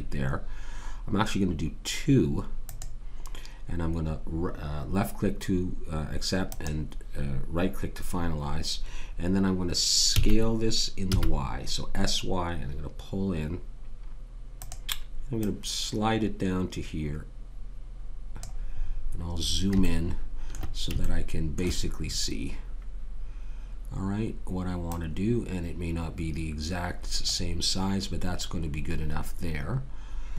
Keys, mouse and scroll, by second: 10.1 s, 15.4 click, 18.9-21.1 middle drag, 21.2 middle click, 21.5 middle click, 24.9 click.